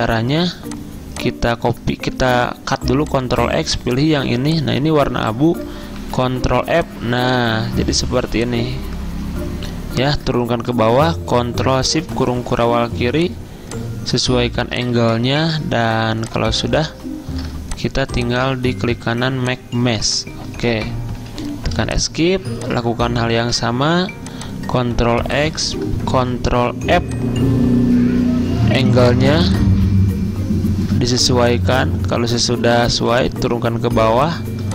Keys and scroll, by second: 3.0 ctrl+x, 5.3 ctrl+z, 6.1 ctrl+f, 21.3 Escape, 23.5 ctrl+x, 26.2 ctrl+f.